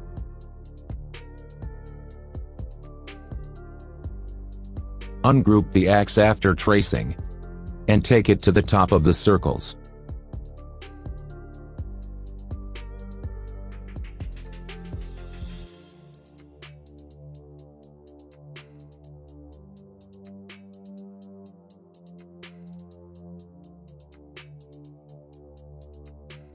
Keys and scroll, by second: 3.4 Delete, 6.6 Escape, 7.4 Delete, 13.2 shift+Page_Up, 14.2 F3, 16.5 ctrl+g, 17.4 shift+F2, 17.7 Escape, 24.4 F3.